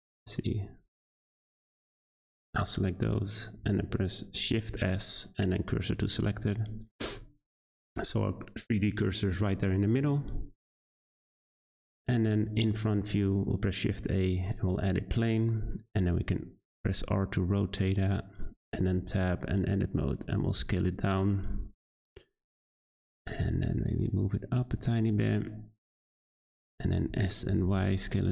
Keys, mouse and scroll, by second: 1.5 click, 1.7 click, 2.8-3.6 scroll down 2, 3.6 shift+s, 4.8 shift+s, 6.6 Tab, 7.5-10.3 middle drag, 10.3 z, 11.1-11.6 scroll down 2, 11.6 click, 12.3 `, 13.1 shift+a, 15.6 r, 18.5 Tab, 18.9 a, 19.1 s, 20.7 1, 21.3 shift+middle click, 21.6-22.9 scroll up 7, 22.9 Tab, 23.3 g, 24.7 Tab, 25.5-26.5 middle drag, 26.5-27.1 scroll down 3, 27.1 s.